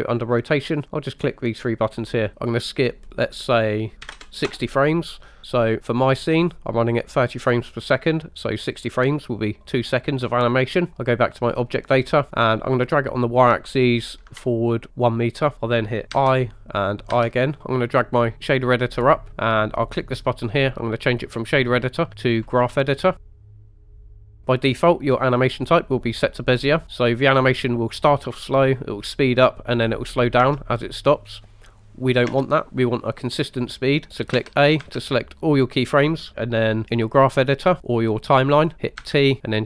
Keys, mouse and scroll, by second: 0.9 click, 3.5-4.5 drag, 6.1 click, 8.8 click, 11.4 click, 13.3 click, 14.9 ctrl+click, 16.1 i, 17.1 i, 17.6 click, 17.6 right click, 18.3 click, 20.0-22.4 drag, 23.2 scroll down 2, 23.2 ctrl+middle click, 24.0 ctrl+middle click, 27.2 click, 30.5 space, 32.4 space, 33.5 click, 34.4 a, 34.8 a, 39.0 t.